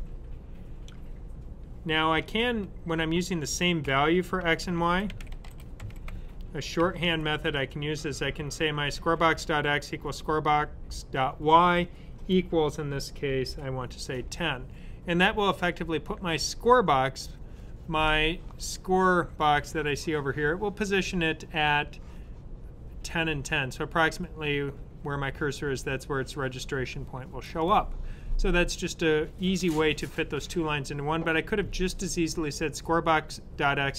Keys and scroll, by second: 2.1 BackSpace, 4.5-7.4 typing, 11.8-14.1 typing.